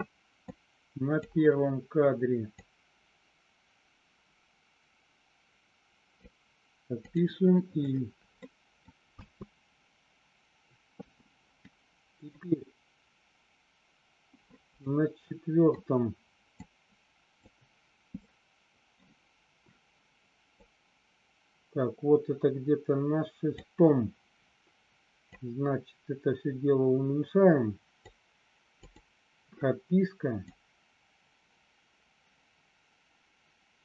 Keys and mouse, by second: 0.5 click, 2.6-6.2 drag, 8.3 middle click, 9.1 space, 11.1 space, 12.5 click, 14.8 middle click, 16.6 click, 18.2 middle click, 20.7-23.6 drag, 25.2-28.1 drag, 30.4-33.8 drag.